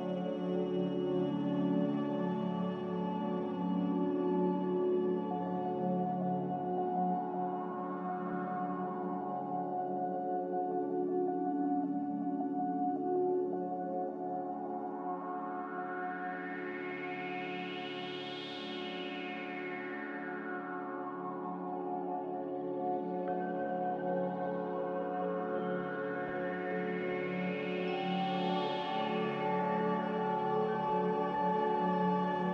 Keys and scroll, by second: 0.5 r, 7.1 a, 17.4 g, 22.0 Escape, 22.3 Escape, 22.7 Escape, 23.4 z, 29.7 a.